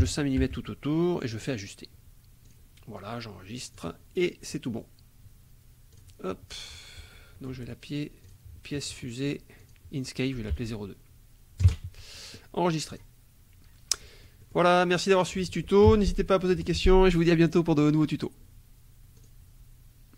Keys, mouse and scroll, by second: 0.0 KP_5, 0.4 Tab, 1.3 click, 2.4 click, 3.7 click, 4.4 middle click, 5.9 click, 8.2 click, 8.8 click, 9.6 click, 10.5 BackSpace, 11.6 KP_0, 12.9 click, 14.0 click, 15.0 click, 19.2 click.